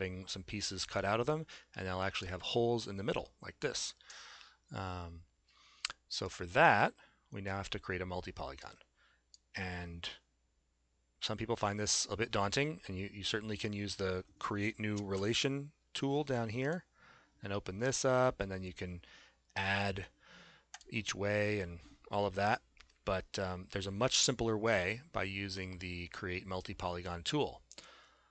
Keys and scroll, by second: 15.0 shift+z.